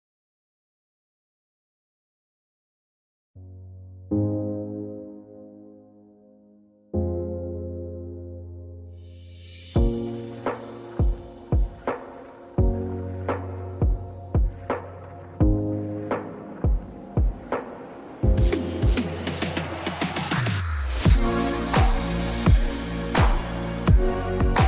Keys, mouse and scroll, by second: 1.6 click, 1.9 scroll down 1, 2.7 click, 4.5 scroll up 1, 6.2 click, 8.6-11.7 drag, 11.7 scroll up 1, 14.5 alt+scroll up 1, 15.2-15.6 alt+scroll down 1, 17.4 click, 21.4 click, 22.4 alt+scroll down 1.